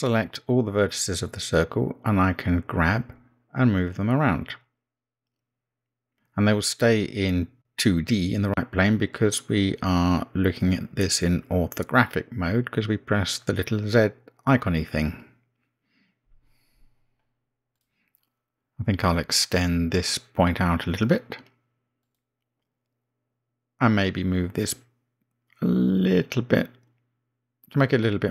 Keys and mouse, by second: 1.2 l, 4.5 g, 22.3 g, 27.3 g.